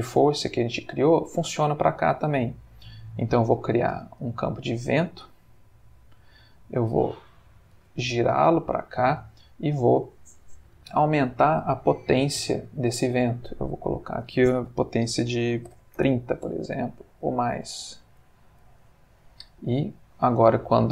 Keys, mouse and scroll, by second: 3.0 click, 4.0 g, 5.9 click, 7.2 click, 7.7 r, 8.7 click, 12.9 click, 13.9 click, 15.6 3, 15.7 0, 16.0 Return, 17.6 click, 18.2 click, 19.1-20.3 middle drag, 20.4 space.